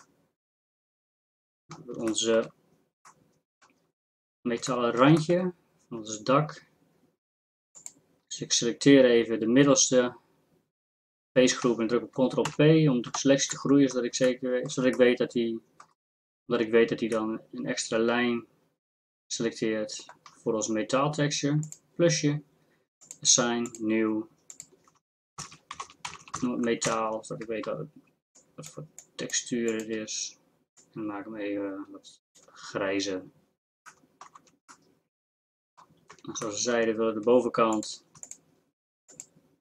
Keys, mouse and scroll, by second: 0.0-1.0 middle drag, 12.5 ctrl+KP_Add, 26.2 a, 34.4 Tab, 36.1 Tab.